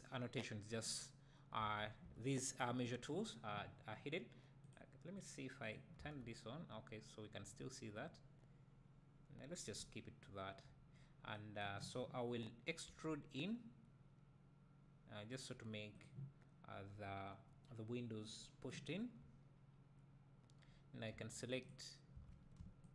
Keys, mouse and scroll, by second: 1.6 Tab, 5.0 click, 5.7 click, 6.0 Tab, 9.8 `, 10.9-11.4 scroll up 1, 12.9 e, 16.0 click, 16.7-19.2 scroll up 1, 19.2 `, 21.1 2, 21.6-22.9 drag.